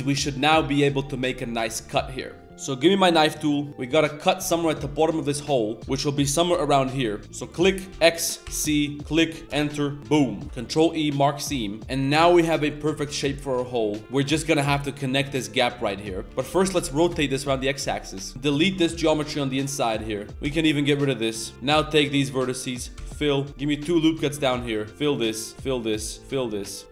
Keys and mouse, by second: 0.1 z, 2.5 z, 2.5 a, 10.0 middle drag, 10.5 ctrl+e, 11.5 middle click, 11.8 ctrl+z, 11.9 Tab, 12.1-12.8 middle drag, 12.9 Tab, 13.1 click, 13.6 shift+middle click, 14.0 middle click, 15.1 click, 16.2 ctrl+z, 16.2 r, 16.3 r, 17.4-19.2 typing, 17.7 drag, 17.8 middle click, 17.9 click, 18.1 click, 18.3 Tab, 19.0 ctrl+KP_Add, 20.1 middle click, 20.3 1, 22.5 middle drag, 23.4 middle click, 23.5 ctrl+r, 23.5 1, 24.5 2, 24.5 click, 24.9 f, 25.0 click, 25.5 shift+click, 25.7 f, 26.5 middle click, 26.8 g.